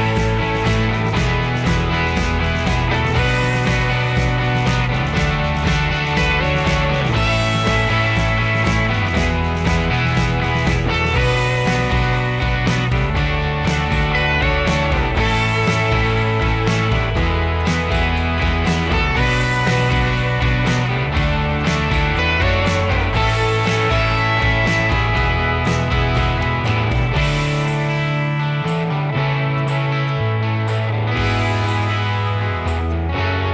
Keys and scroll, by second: 7.5 Escape, 7.7 Escape.